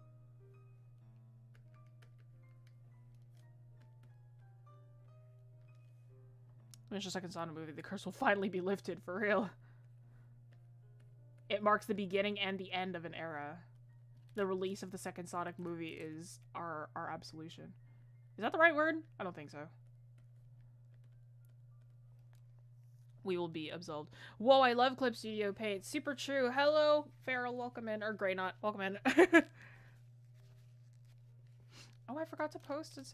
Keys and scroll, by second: 6.5 ctrl+z.